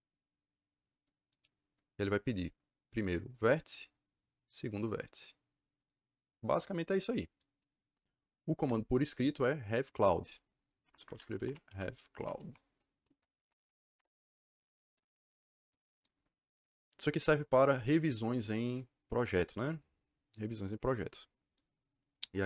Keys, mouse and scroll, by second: 3.6 click, 5.7 click, 8.5 Return, 10.7 Escape, 10.9 Escape, 11.0-12.7 typing, 13.3 Down, 13.5 Up, 13.9 Return, 18.6 click, 19.5 click.